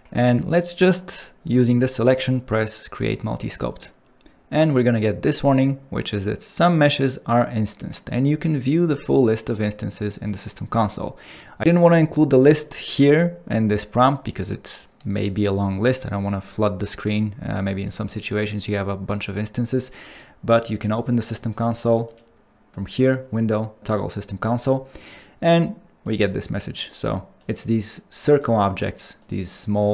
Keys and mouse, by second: 4.1-19.6 drag, 21.0-22.2 drag, 29.5 click, 29.8 click.